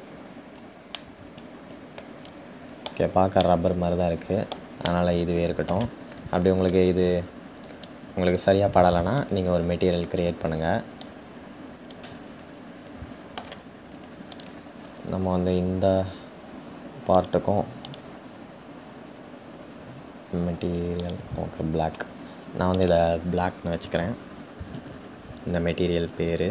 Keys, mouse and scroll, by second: 0.9-7.8 middle drag, 7.8 click, 10.6 click, 11.9-14.0 middle drag, 14.0 click, 20.7 click, 22.9-26.5 drag.